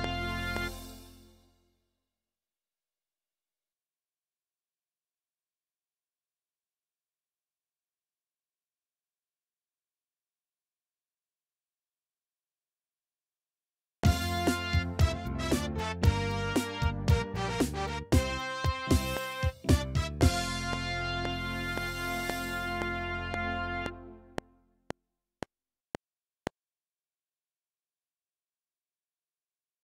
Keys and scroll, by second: 0.6 space, 11.9 Up, 13.9 space.